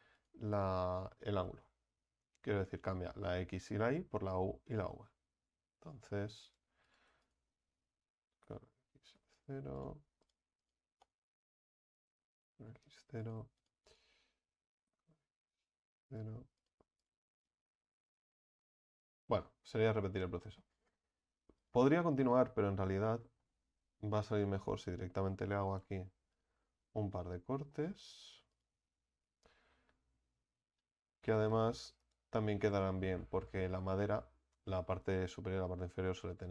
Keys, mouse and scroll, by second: 0.2 right click, 1.5 s, 6.9 right click, 8.3 s, 9.8-11.8 right drag, 11.8 s, 13.2 right click, 14.7 s, 16.6-20.4 right drag, 20.4 middle click, 21.0 scroll up 2, 21.6 right click, 22.1 alt+shift+right click, 22.3 alt+shift+right click, 23.1-24.3 middle drag, 24.3 alt+shift+right click, 26.3 alt+shift+right click, 27.1-28.5 middle drag, 28.5 alt+shift+right click, 32.2 u, 32.6-36.2 middle drag, 36.2-36.5 scroll down 3.